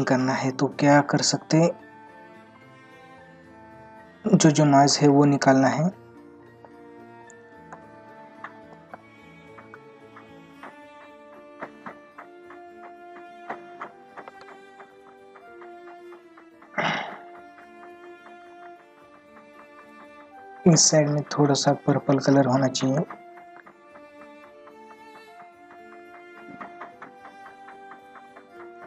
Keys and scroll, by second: 2.0 ctrl+=, 4.8 space, 14.2 ctrl+alt+z, 16.6 ctrl+-, 22.3 ctrl+-.